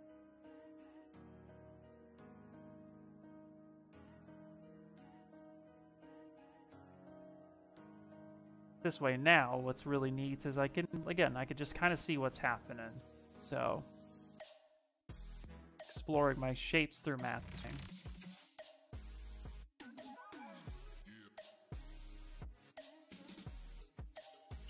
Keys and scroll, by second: 3.4 s, 4.8 s, 10.5 ctrl+z, 13.0 s.